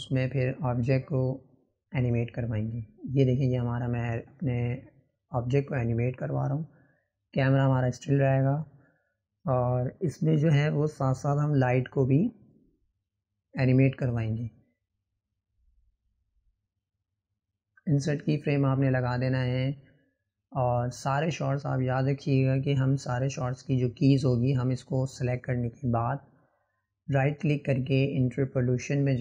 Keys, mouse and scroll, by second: 0.1-2.1 drag, 3.9 click, 7.9-10.9 drag, 19.0-21.4 right drag, 21.6 click, 23.2-26.4 drag.